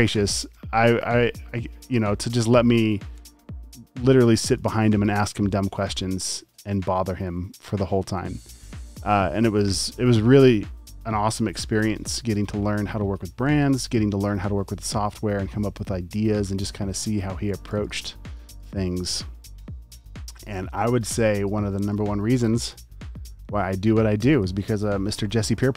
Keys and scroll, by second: 0.6 a, 3.2 shift+super+g, 3.5 v, 9.2 space, 9.5 v, 11.8 space, 13.6 space, 14.0 v, 17.4 space, 17.9 alt+super+space, 18.5 space, 18.7 v, 20.7 space, 21.3 super+space, 22.0 a, 23.5 typing.